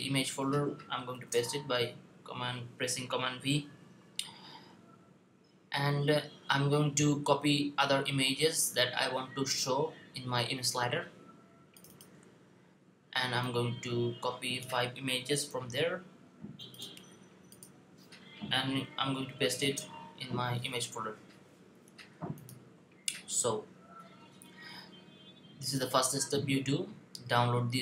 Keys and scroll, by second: 0.9 super+v, 15.3 super+c, 19.3 super+v.